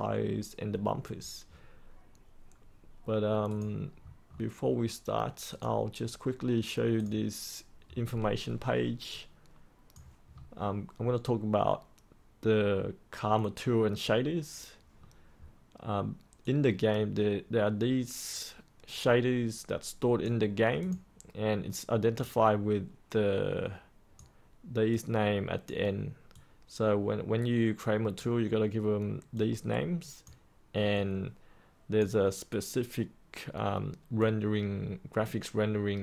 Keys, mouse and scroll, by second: 3.4 click, 3.9 scroll up 1, 4.2-5.5 scroll down 1, 5.5-10.1 drag, 10.2-13.9 scroll up 1, 13.9-14.9 scroll down 1, 15.4-16.4 scroll up 1, 16.4-36.0 drag.